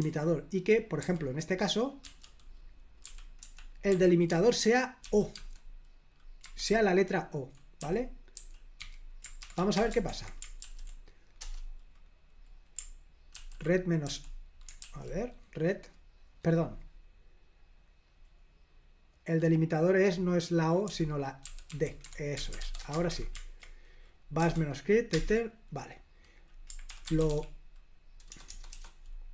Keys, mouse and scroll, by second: 0.0-1.0 typing, 2.0-5.3 typing, 6.4 Escape, 6.6-11.0 typing, 9.7 Return, 10.1 super+h, 13.3 ctrl+p, 14.0 l, 14.8 super+l, 18.0-19.0 scroll down 1, 20.8-23.0 typing, 23.1 super+h, 24.4 BackSpace, 25.1 Return, 26.8-28.7 typing.